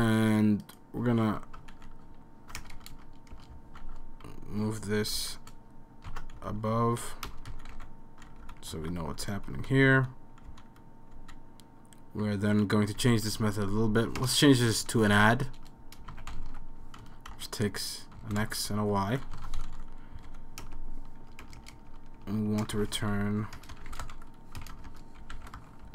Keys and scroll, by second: 1.8 shift+super+Left, 2.6 BackSpace, 2.8 BackSpace, 2.9 BackSpace, 3.3 BackSpace, 5.2 shift+super+Left, 6.1 super+x, 6.4 Up, 6.5 Up, 6.6 Up, 6.8 Up, 6.9 Up, 7.3 Return, 7.5 Up, 7.7 super+v, 8.4 Down, 8.7 super+s, 9.2 Down, 9.4 Down, 9.8 Down, 10.0 Down, 10.7 Down, 11.2 Down, 12.3 Down, 13.0 Up, 13.5 Right, 14.2-16.4 typing, 17.3 Right, 17.9-19.3 typing, 19.7 super+s, 19.7 Down, 20.3 Right, 20.7-25.9 typing.